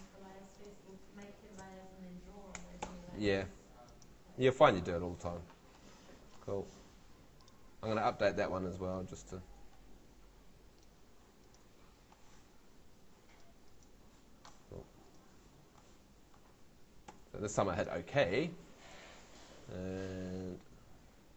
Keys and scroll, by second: 1.6 super+v, 2.5 super+BackSpace, 2.8 2, 17.1 Escape.